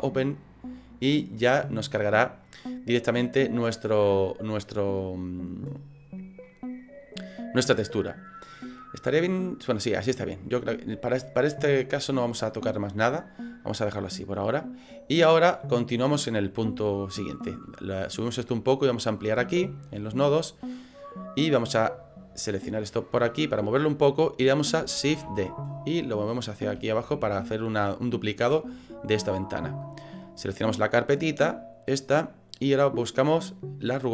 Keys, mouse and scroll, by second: 2.5 middle click, 6.6 middle click, 8.6 middle click.